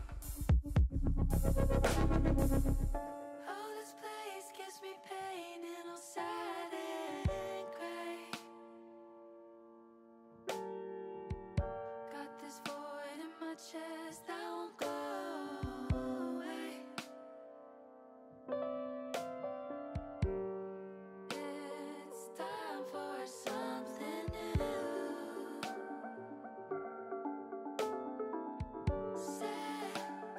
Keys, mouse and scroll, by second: 5.7 shift+middle click, 9.0-10.4 middle drag, 10.6 middle click, 11.6 shift+middle click, 13.3 click, 14.6 click, 18.3 s, 19.7 click, 21.2 middle click, 22.6 click, 23.7 click, 24.5 g, 24.7 g, 27.3 click, 28.9 g, 29.0 g, 30.2 click.